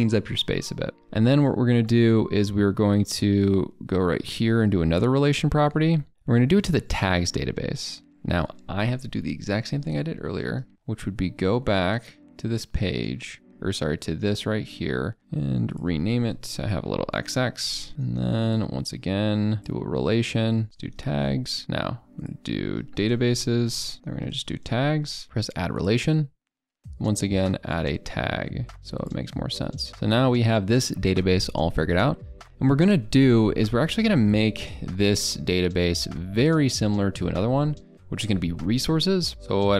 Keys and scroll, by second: 13.1 ctrl+[.